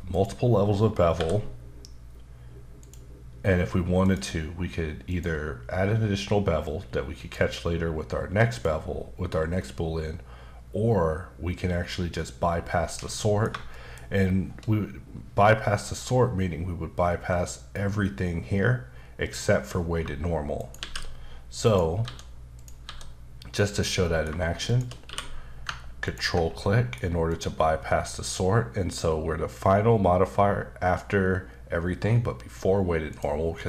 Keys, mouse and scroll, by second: 0.1 click, 1.2 n, 2.8 click, 4.0 click, 5.1 click, 6.6 click, 8.5 click, 13.1 middle click, 13.7 shift+middle click, 20.5 shift+right click, 20.8 shift+a, 21.6 click, 22.0 s, 22.5 click, 22.8 s, 23.7 click, 24.0 middle click, 24.7 shift+click, 25.1 q, 26.0 ctrl+click, 26.5 middle click, 27.3 click, 33.1 click, 33.5 middle click.